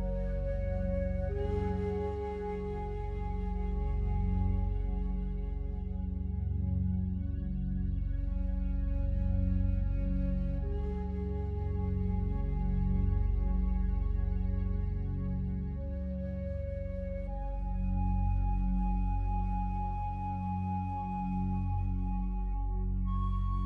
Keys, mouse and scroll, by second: 0.0-1.1 alt+drag, 1.1 x, 2.6 click, 5.0-9.0 alt+drag, 9.0 right click, 10.2 2, 10.9 right click, 12.3 shift+right click, 13.1-16.0 drag, 16.0 x, 16.8 right click, 18.1 ctrl+z, 19.8 shift+right click, 22.6 shift+right click, 23.3-23.6 drag.